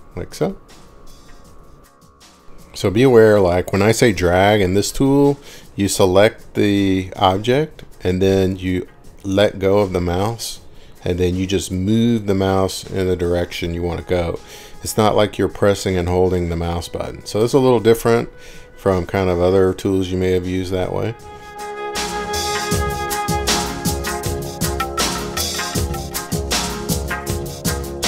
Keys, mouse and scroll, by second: 1.0 middle click, 1.4 scroll down 1, 1.5-2.1 scroll down 5, 3.1 middle click, 3.6 scroll down 3, 3.9-5.5 scroll up 1, 6.2 middle click, 7.3 scroll down 1, 7.6-8.7 scroll down 5, 9.0 scroll up 1, 9.4 scroll, 9.5 scroll up 6, 9.9 scroll down 2, 11.1 scroll, 11.5 scroll down 1, 13.9-14.5 scroll down 3, 14.7 scroll, 15.5 scroll, 16.9 click, 21.1 Escape, 24.1 middle click, 24.7 middle click, 24.9 scroll down 3, 26.1 Escape.